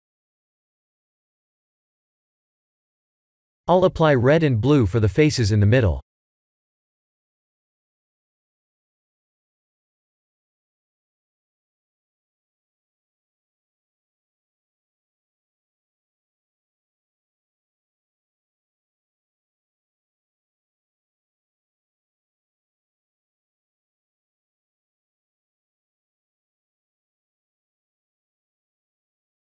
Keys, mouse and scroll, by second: 1.9 drag, 5.0 click, 6.5 click, 7.6-9.0 drag, 10.3 click, 14.1 click, 15.7 click, 16.4-17.7 middle drag, 18.3 alt+click, 19.8 click, 20.7 shift+click, 21.6 click, 22.3 click, 23.2 click, 24.1 shift+click, 25.2 click, 26.0 click, 26.7-28.3 middle drag, 29.1 click.